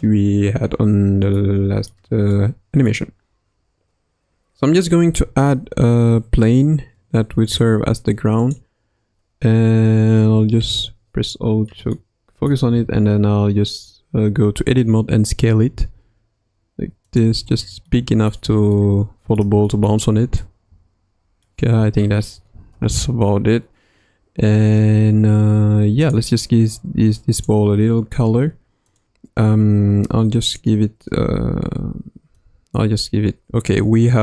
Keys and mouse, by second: 1.4-1.9 middle drag, 2.3-2.9 middle drag, 5.0 shift+a, 10.6 KP_Decimal, 12.0-12.5 middle drag, 12.7 Tab, 15.7 s, 17.3 Tab, 17.9-18.3 middle drag, 18.8-19.4 middle drag, 19.7 shift+middle click, 20.4-21.5 middle drag, 22.7 KP_0, 26.0 click, 27.4 click, 28.9-29.3 drag.